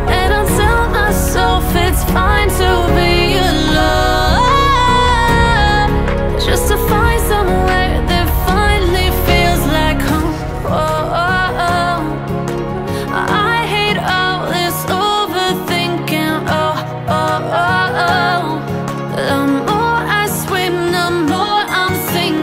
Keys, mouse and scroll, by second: 0.5 ctrl+click, 1.8-4.8 middle drag, 5.6 ctrl+click, 6.8 middle click, 7.7 scroll down 3, 8.8 click, 9.2-10.5 middle drag, 11.0-11.6 scroll up 7, 11.6-14.6 middle drag, 15.9-16.7 scroll down 7, 16.7 middle click, 17.4-18.3 scroll up 9, 18.3 middle click, 19.0-19.5 scroll up 2, 19.5-19.9 scroll down 2, 19.9 middle click, 20.7-21.0 scroll down 3, 21.0 middle click, 21.4-22.3 scroll down 7, 22.3 middle click.